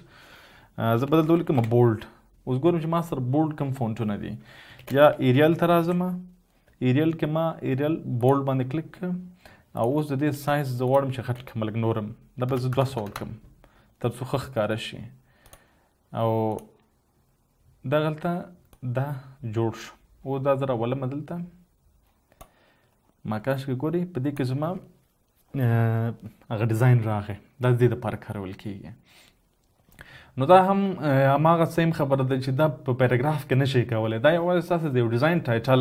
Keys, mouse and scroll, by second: 1.4-2.0 typing, 5.3-6.1 typing, 12.8-13.3 typing, 13.3 Return.